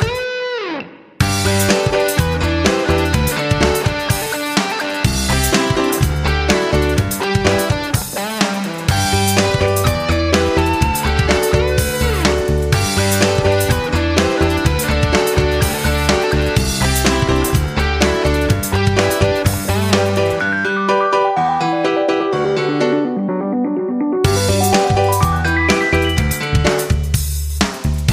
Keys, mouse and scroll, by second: 2.2-7.6 scroll up 1, 7.6 click, 9.5 F9, 10.8 F5.